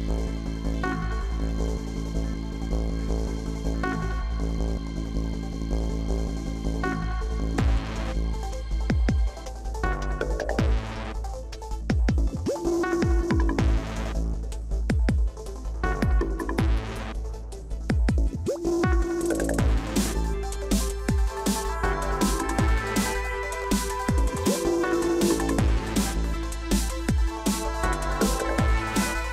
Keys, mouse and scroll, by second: 3.6 ctrl+click, 12.2 right click, 24.7 ctrl+-, 25.4 ctrl+-, 26.0 ctrl+-.